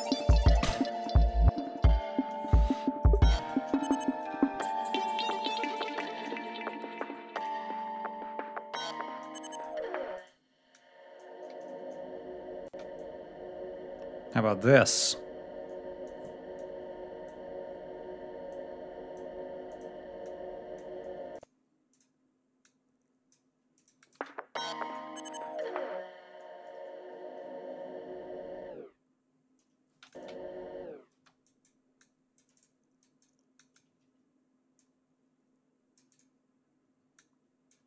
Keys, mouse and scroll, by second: 1.7 click, 2.9 shift+right click, 4.1 click, 4.9 click, 6.3 ctrl+scroll down 2, 6.5 ctrl+scroll up 2, 10.6 click, 11.5-12.0 ctrl+scroll up 2, 12.6 space, 12.9-15.2 drag, 15.9 click, 16.5 click, 17.5 scroll down 1, 18.4 click, 19.6 click, 20.1 click, 21.2 click, 21.8 click, 22.5 click, 24.1 space, 24.9 ctrl+scroll down 2, 25.2 ctrl+scroll up 2, 29.8 space, 29.9 click, 30.3 ctrl+scroll up 2, 31.0 space, 31.3 click, 31.9 click, 32.9 click, 33.5 click, 34.7-36.3 drag, 37.1 click.